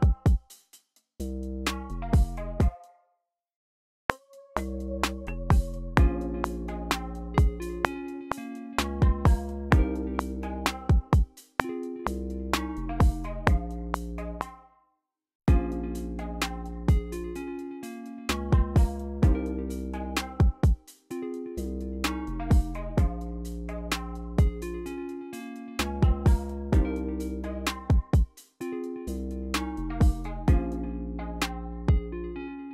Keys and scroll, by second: 2.3-2.7 typing, 4.0 r, 14.0 space, 14.5 q, 14.9 e, 15.4 space, 22.4 typing, 22.9 super+r, 29.8-31.1 typing.